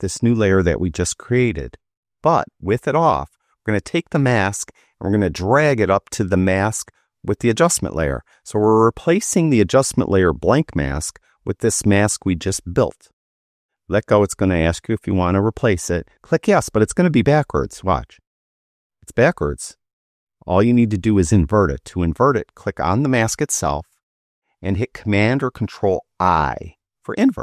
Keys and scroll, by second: 26.3 super+i.